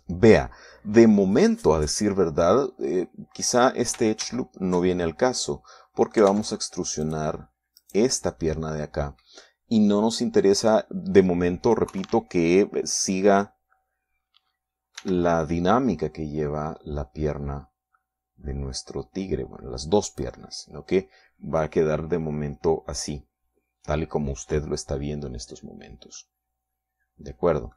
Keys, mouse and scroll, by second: 5.7 ctrl+z, 6.4 ctrl+click, 6.5-7.9 ctrl+middle drag, 7.8 ctrl+Tab, 8.5 click, 9.3 right click, 13.4 KP_3, 16.5 e, 21.6 click, 27.7 click.